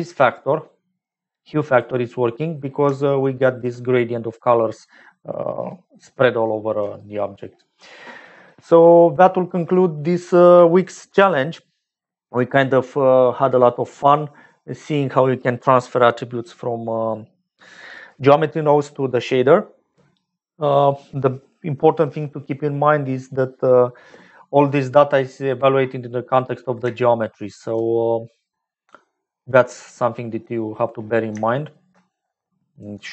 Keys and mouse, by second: 0.8 click, 2.8 shift+middle click, 25.5-26.7 middle drag, 27.0 shift+middle click, 27.8 middle click, 29.3 middle click, 30.0 middle click, 31.5 shift+middle click, 32.0-33.1 middle drag.